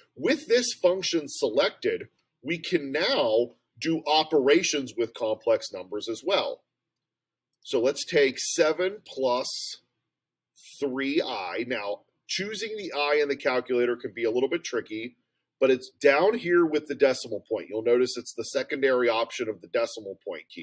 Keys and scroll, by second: 7.5 (, 8.4 7, 10.7 3.